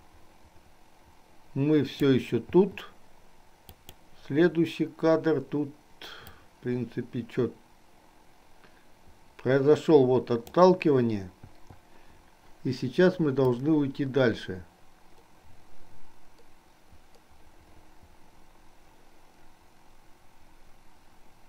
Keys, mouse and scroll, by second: 2.8 i, 4.0 click, 6.4-10.9 drag, 11.6 i, 13.6-21.4 drag.